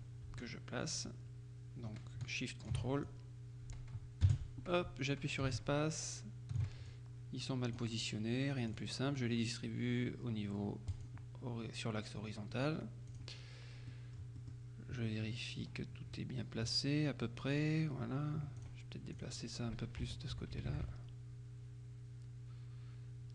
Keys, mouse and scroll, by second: 4.3 space, 6.9 ctrl+click, 8.7 click, 11.0 click, 13.1 click, 14.0-15.1 drag, 15.4 click, 18.7-19.8 drag, 20.1 Left.